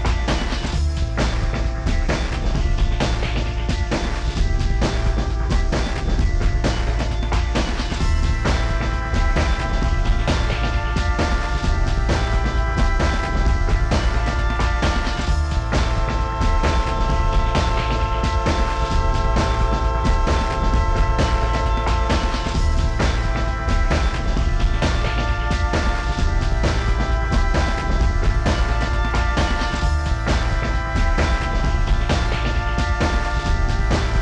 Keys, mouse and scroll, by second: 0.0 m, 0.4 shift+scroll up 13, 0.7 shift+click, 0.8-1.4 scroll down 23, 0.9 middle click, 1.4 middle click, 1.7 scroll up 4, 1.9 scroll down 1, 1.9 Escape, 2.1 middle click, 2.9 double click, 3.2 middle click, 3.3 scroll up 2, 3.7 middle click, 3.9 scroll down 4, 3.9 shift+middle click, 4.5 shift+click, 4.8 space, 4.9-5.6 scroll up 14, 5.3 middle click, 11.5 middle click, 11.7 middle click, 11.7 shift+scroll down 2, 11.8 space, 11.8-12.4 scroll up 8, 11.9 s, 14.9 double click, 18.1 middle click, 18.2 scroll down 10, 18.3 middle click, 18.5 shift+middle click, 18.6 space, 18.8 s, 19.5-20.5 scroll up 27, 25.0 middle click, 25.1 scroll down 20, 25.3 shift+middle click, 25.4 s, 25.5 scroll up 10.